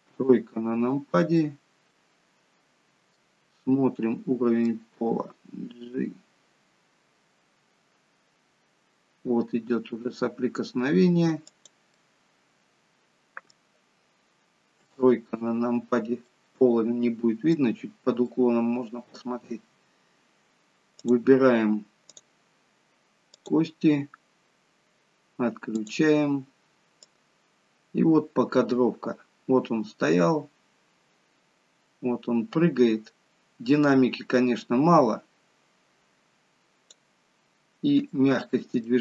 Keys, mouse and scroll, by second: 0.2 KP_3, 1.5 middle click, 2.3-3.2 scroll up 3, 3.2 middle click, 5.0 g, 12.0 middle click, 14.9 KP_3, 16.4 middle click, 17.8-18.5 scroll down 2, 18.3 middle click, 21.0 click, 22.2 click, 23.7 click, 25.9 click, 27.2 click, 37.5-38.2 scroll up 1, 38.2 shift+middle click, 38.2-38.9 scroll up 1.